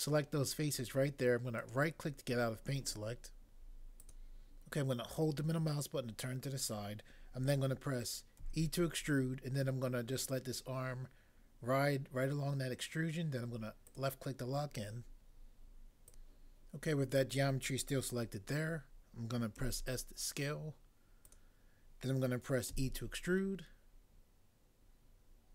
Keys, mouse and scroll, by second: 1.7 right click, 4.1 click, 8.4 e, 19.6 s, 21.3 click, 22.7 e.